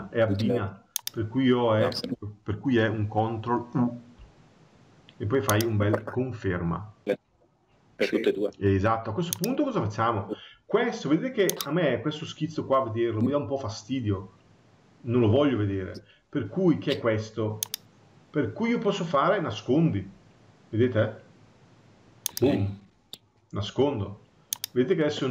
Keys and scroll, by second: 3.4 ctrl+u.